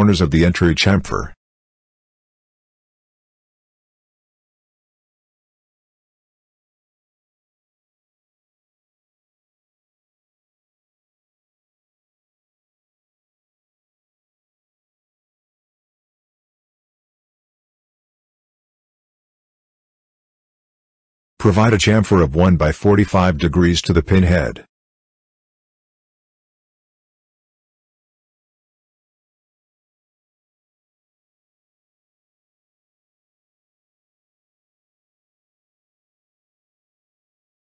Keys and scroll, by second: 5.1 1, 26.1 1, 28.5-29.4 typing.